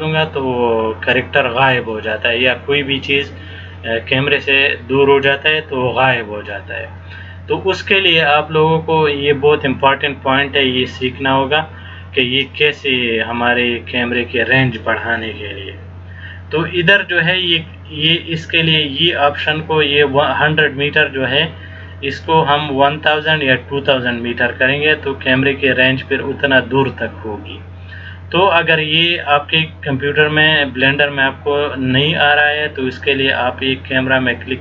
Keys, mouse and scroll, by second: 9.6-10.3 scroll down 2, 10.4 scroll up 1, 11.0-11.7 scroll up 1, 11.7 scroll down 1, 12.4-13.0 scroll up 1.